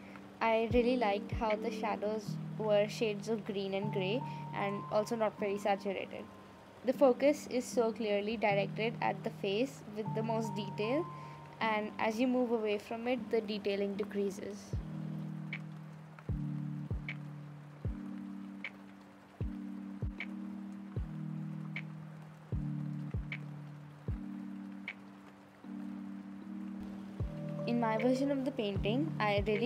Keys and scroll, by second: 19.9 space, 20.4 space, 22.0 space.